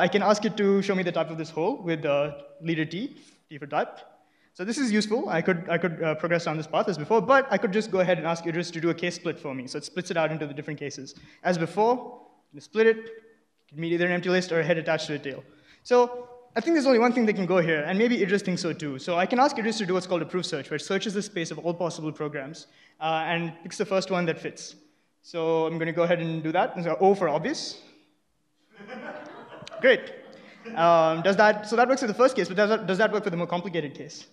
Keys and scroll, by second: 0.0 Right, 0.2 Right, 0.3 Right, 0.7 Right, 1.8-2.8 typing, 7.0 Left, 7.1 Left, 7.3 Left, 7.6 Left, 8.0 Left, 11.0-11.7 typing, 15.4-15.7 Right, 15.9 Right, 16.0 Right, 16.2 Right, 27.2-28.5 typing, 31.1 Down, 31.3 Right, 31.4 Right, 31.9 Right, 32.1 Right, 32.5 Right.